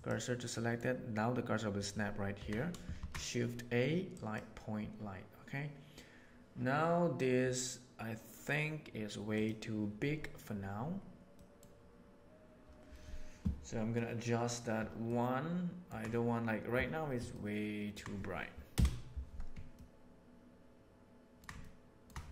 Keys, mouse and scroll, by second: 0.5 middle click, 2.4 Tab, 2.9 shift+a, 15.0-15.8 ctrl+middle drag.